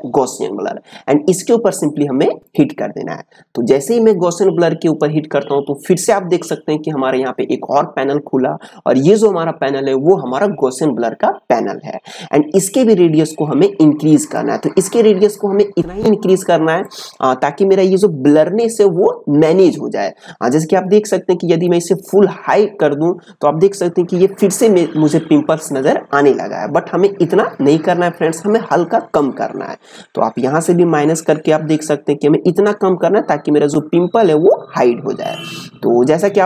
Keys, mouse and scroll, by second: 2.4-13.6 drag, 13.6-19.1 drag, 20.5-24.4 drag, 27.6-36.4 drag.